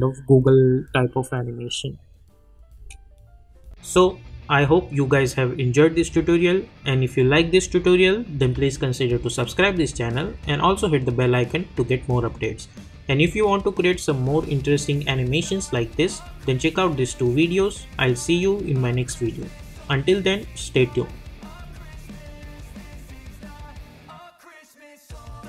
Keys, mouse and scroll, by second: 2.7 space.